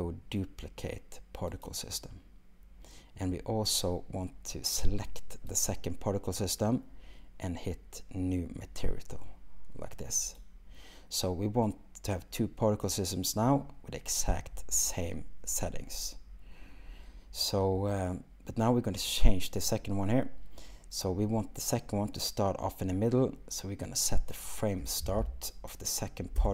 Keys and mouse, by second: 5.6-10.5 drag, 24.4-26.5 drag.